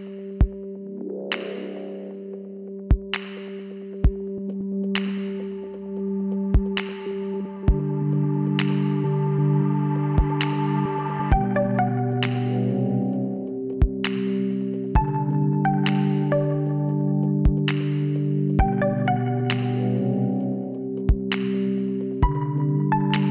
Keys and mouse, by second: 2.4 KP_7, 4.6 s, 8.5 r, 14.4-15.9 middle drag, 15.3 z, 15.9-21.8 drag.